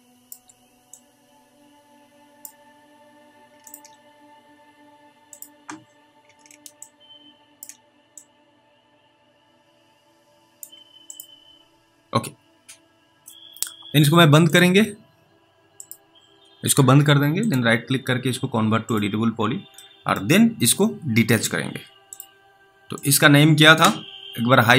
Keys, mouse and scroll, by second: 1.2 click, 3.6 ctrl+click, 7.1 ctrl+click, 8.4 click, 19.3-20.0 scroll down 1, 20.0 middle click, 22.1 click.